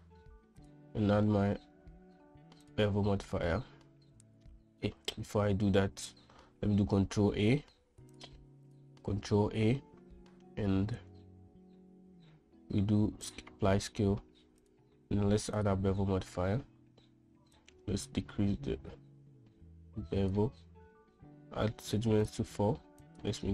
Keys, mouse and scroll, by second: 5.6 ctrl+z, 7.4 shift+a, 9.2 click, 9.6 shift+a, 15.2-16.2 drag, 18.1-21.0 shift+drag, 22.5-23.5 drag.